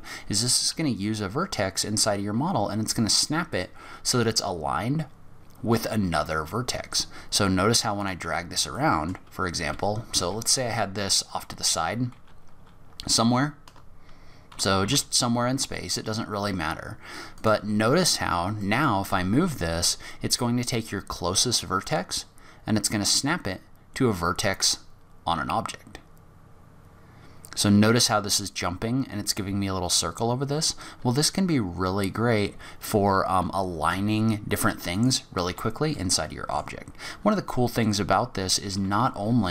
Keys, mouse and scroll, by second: 0.7 g, 8.3 scroll up 5, 8.7 middle click, 9.5 g, 11.5 scroll down 3, 12.1 g, 17.9-18.6 scroll up 2, 18.6 middle click, 19.1 g, 35.3 scroll down 5, 36.0 middle click, 37.3-37.7 scroll up 2, 38.7 g.